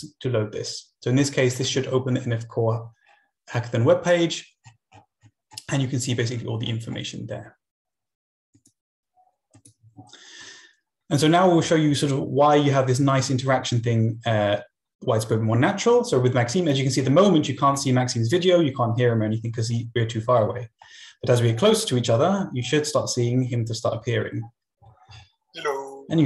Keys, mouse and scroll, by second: 3.0-6.3 scroll down 3, 8.5-10.6 drag, 11.6 End, 11.8 Down, 13.2 Left, 16.2 Left, 16.8 Left, 17.6 Right, 20.7 Right, 20.9 Right, 21.1 Right, 21.2-22.9 Right, 24.5 Right, 24.8 Right, 25.1 Right.